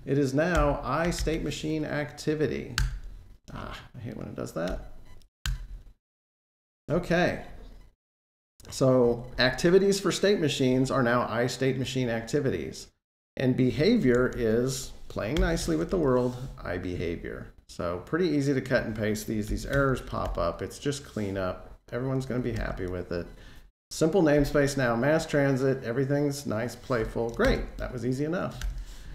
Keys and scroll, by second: 2.6 Return, 3.3 super+z, 5.3 Return, 15.5 Escape, 22.4 super+f, 27.3 alt+shift+Page_Down, 28.4 alt+shift+Page_Down.